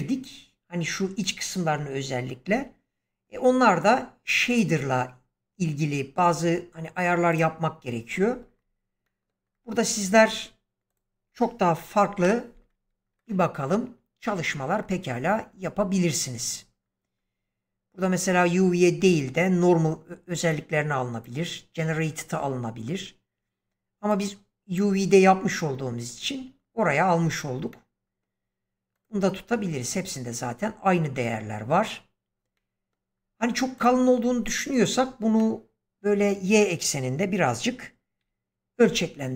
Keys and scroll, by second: 2.4 Escape, 12.0 /, 38.7 s.